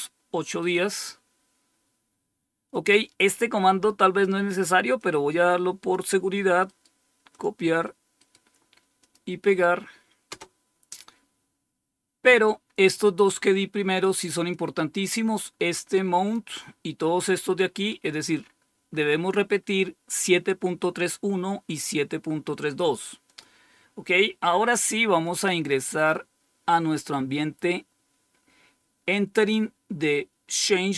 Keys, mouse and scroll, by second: 0.4-1.8 scroll down 1, 1.8-2.4 scroll down 1, 2.4-4.9 scroll down 1, 4.9-5.9 drag, 6.7 right click, 7.3 click, 8.1 right click, 8.9 click, 10.2 Return, 12.1-13.3 scroll up 1, 14.5-16.3 drag, 17.9-19.4 scroll up 3, 19.4-20.3 scroll up 1, 20.3-20.8 scroll down 6, 23.2 click, 25.2 click.